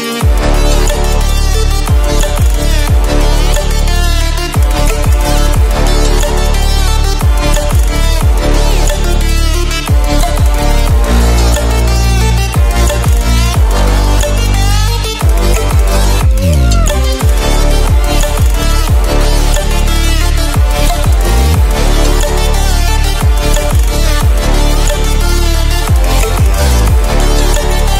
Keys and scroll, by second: 4.7 ctrl+e, 7.2 ctrl+e, 9.1 ctrl+e.